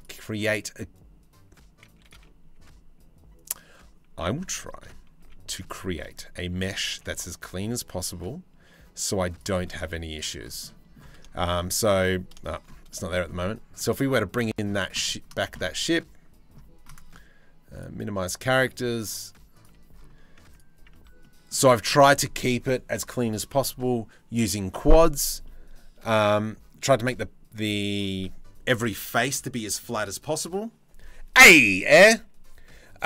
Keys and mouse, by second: 2.2 s, 4.5 KP_7, 4.8 z, 6.0 shift+middle click, 6.5 g, 9.5 z, 10.3 drag, 11.0 middle click, 11.4 click, 12.1 shift+click, 15.1 click, 19.2 click, 20.4 Tab, 20.8 click, 25.0-26.3 middle drag.